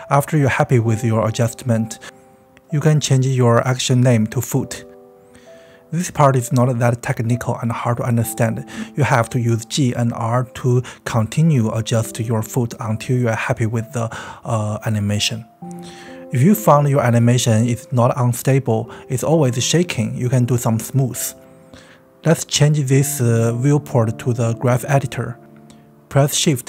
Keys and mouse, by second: 0.0-0.7 typing, 1.6 click, 2.3-8.6 typing, 3.1 click, 3.2 shift+middle click, 3.7 shift+middle click, 3.8 click, 4.3-5.3 drag, 5.5 click, 6.1 drag, 6.5 click, 7.5 drag, 8.2 middle click, 9.3 click, 9.6 click, 9.9 click, 10.0 space, 14.9 space, 20.5 click, 22.2-23.8 drag.